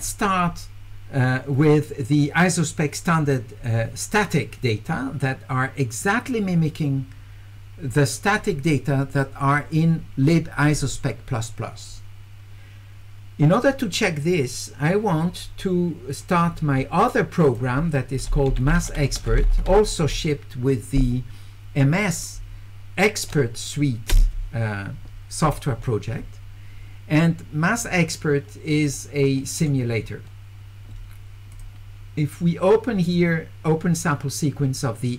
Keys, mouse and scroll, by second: 16.2 click, 17.4 click, 18.3-19.9 typing, 27.7 click, 28.8 click, 31.5 click.